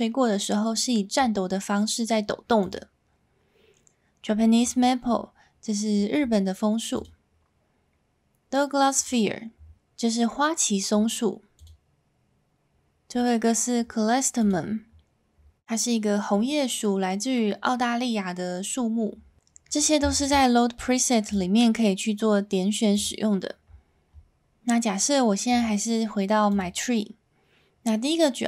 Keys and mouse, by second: 2.7-4.7 drag, 7.0-9.1 drag, 11.7-14.5 drag, 21.3-23.0 drag, 25.5-26.6 drag.